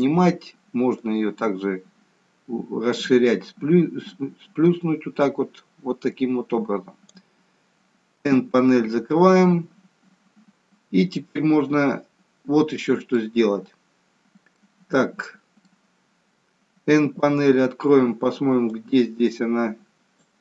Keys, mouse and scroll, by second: 0.9 click, 8.2 n, 9.0 middle click, 14.5 middle click, 17.0 n, 18.7 click.